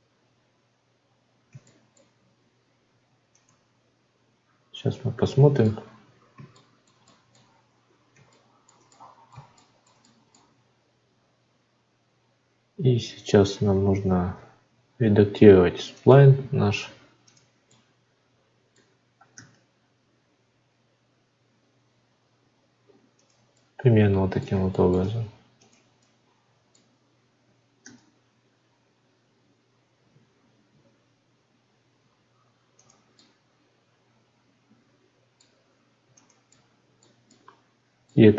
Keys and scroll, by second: 10.5 Tab.